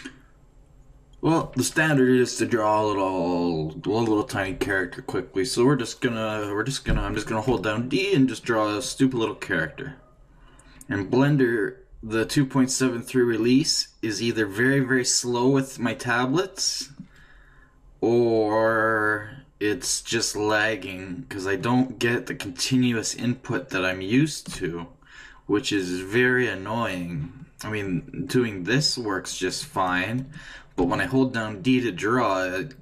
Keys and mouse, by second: 7.5-24.5 d, 8.7-10.5 drag, 10.7 click, 11.5-13.3 drag, 16.0-17.6 drag, 18.9 click, 29.3 click, 30.8-32.8 d.